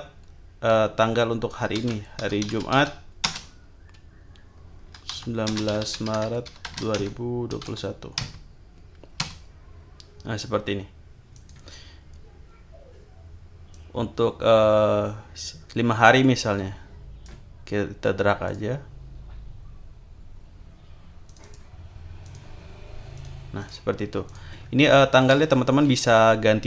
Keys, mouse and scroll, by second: 1.6-3.2 typing, 4.7-8.1 typing, 9.2 Return, 11.3 click, 13.7-17.4 drag, 18.4 click, 21.3 click, 22.2-22.9 drag, 23.1 click, 23.6 click, 24.3 click, 25.1 shift+click.